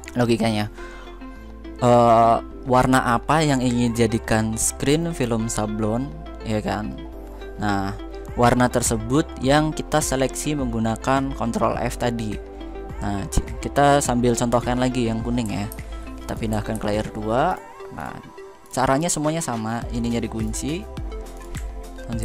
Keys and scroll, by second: 15.4 ctrl+x, 21.9 ctrl+u.